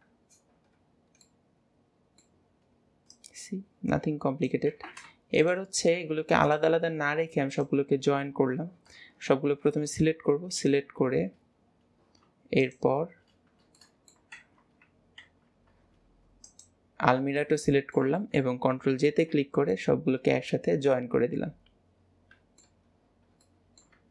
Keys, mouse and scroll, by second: 1.3-3.2 middle drag, 3.2 click, 5.4 click, 6.5 click, 7.6 click, 10.0 click, 10.6 click, 12.7 click, 13.8-14.5 middle drag, 16.5 click, 17.5-19.1 middle drag, 19.7-22.8 middle drag, 23.0 scroll down 4, 23.5-24.1 middle drag.